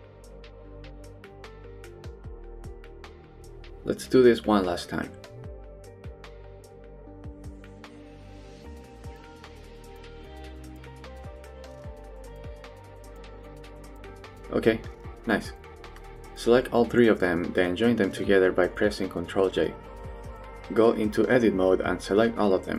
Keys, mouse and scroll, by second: 0.0 click, 0.1 middle click, 0.7 middle click, 1.0 g, 1.6 middle click, 2.2 middle click, 2.6 Tab, 2.8 click, 3.2 middle click, 3.6 shift+d, 4.0 right click, 4.4 scroll up 1, 4.5 middle click, 4.9 Tab, 5.3 middle click, 6.4 click, 6.5 middle click, 6.8 g, 7.4 middle click, 7.8 g, 8.3 middle click, 8.8 middle click, 9.1 middle click, 9.4 g, 9.7 middle click, 10.1 middle click, 10.6 g, 11.1 middle click, 11.4 click, 11.6 middle click, 12.0 middle click, 12.3 shift+middle click, 12.9 g, 13.6 g, 14.2 middle click, 15.1 Tab, 15.3 shift+middle click, 15.5 middle drag, 16.0 drag, 17.9 ctrl+j, 18.6 drag, 19.1 middle click, 20.6 middle click, 20.7 Tab, 21.2 a.